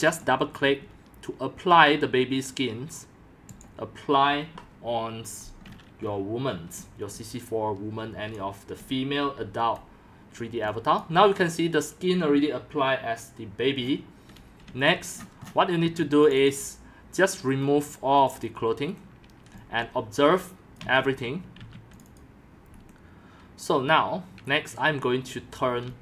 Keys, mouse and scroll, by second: 0.1 click, 3.5 click, 3.7-5.5 drag, 5.6-6.1 scroll, 6.8-9.4 typing, 8.3 click, 9.8 click, 10.6 c, 11.0-12.9 drag, 13.8-14.3 scroll down 6, 14.1-15.8 typing, 14.7 scroll up 6, 14.9 click, 15.2-16.3 middle drag, 15.2-15.6 scroll, 16.3 scroll up 10, 16.3 click, 17.4 Delete, 18.3 click, 18.4 click, 18.9 Delete, 19.0-20.4 drag, 19.2-22.1 typing, 21.2 click, 21.3 click, 22.0 click, 22.2 click, 22.7 Delete, 25.6-26.0 typing.